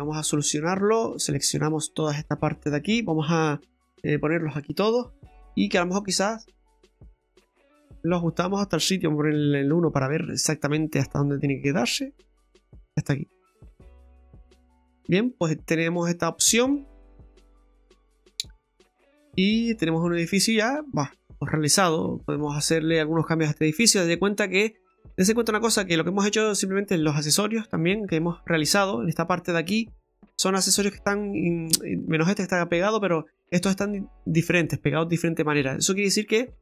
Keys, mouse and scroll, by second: 0.0 middle click, 1.5 alt+shift+right click, 2.9 alt+shift+right click, 3.8 KP_Divide, 4.8 scroll up 2, 5.3 shift+middle click, 5.9 middle click, 6.5 shift+middle click, 7.4 scroll up 1, 7.5 click, 7.5 scroll down 1, 9.3 KP_1, 11.6 click, 14.0 scroll down 2, 14.4 middle click, 15.0 scroll down 1, 15.3 middle click, 16.9 scroll down 1, 17.2 middle click, 17.9 shift+middle click, 18.5 middle click, 21.8-23.1 scroll up 2, 23.1 scroll down 2, 23.6 middle click, 26.0 scroll up 1, 27.6 Tab, 28.1 right click, 29.9 right click, 30.5 middle click, 31.2 right click, 31.6 right click, 33.0 right click, 33.6 right click, 35.8-36.2 scroll down 2, 36.2 middle click.